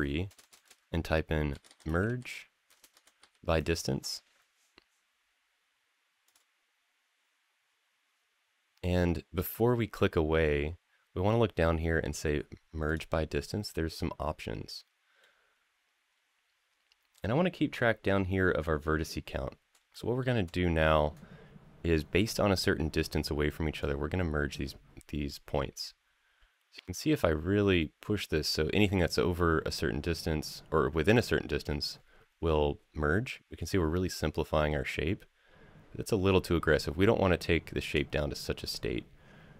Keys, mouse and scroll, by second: 0.2 BackSpace, 0.4 BackSpace, 12.6 click, 14.4 middle click, 15.2-17.3 scroll up 3, 19.3 scroll down 1, 19.7 shift+middle click, 23.6-39.5 drag.